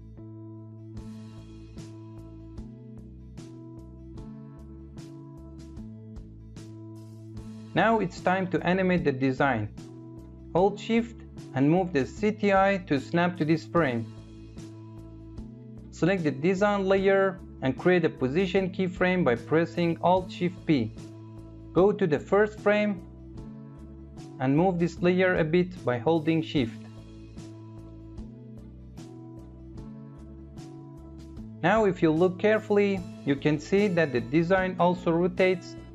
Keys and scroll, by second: 18.2 alt+shift+p.